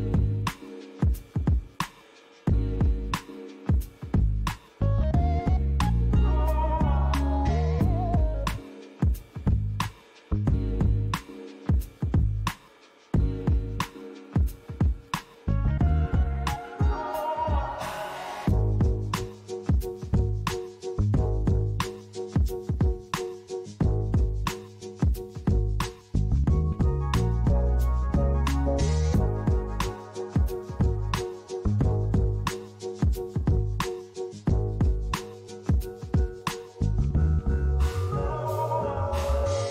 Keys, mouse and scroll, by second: 2.0 p, 4.6 right click, 7.8 Tab, 8.8 click, 10.9 Tab, 11.2-11.8 scroll up 3, 11.8 click, 13.1 i, 16.7 click, 17.2 i, 19.0 click, 19.5 i, 21.3 click, 21.5 i, 24.5 click, 25.5 o, 26.7 g, 27.6 z, 29.8-30.3 scroll up 2, 30.3-31.8 scroll down 6, 34.7 click, 36.6 click, 38.4 2, 39.2 click.